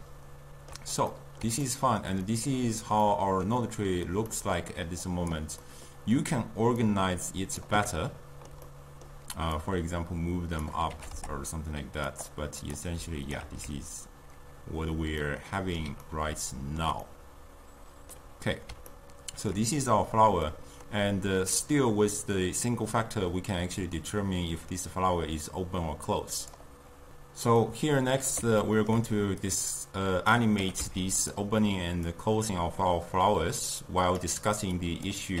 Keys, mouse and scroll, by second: 0.0-5.2 ctrl+middle drag, 5.2 click, 5.7-6.9 middle drag, 6.9-8.0 drag, 8.0-9.6 ctrl+middle drag, 9.6-11.0 drag, 11.0 g, 12.7 click, 13.0-13.5 drag, 13.5 ctrl+x, 15.2-21.6 middle drag, 21.6-24.7 drag, 27.6-29.5 middle drag, 29.5-30.6 drag, 30.6 g, 32.1-35.4 drag.